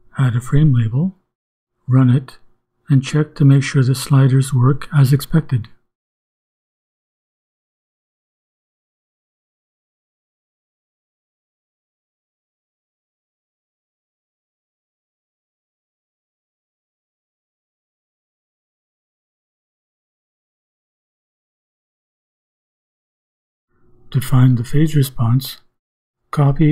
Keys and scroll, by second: 0.0-11.2 typing, 0.1 Return, 11.9 shift+Return.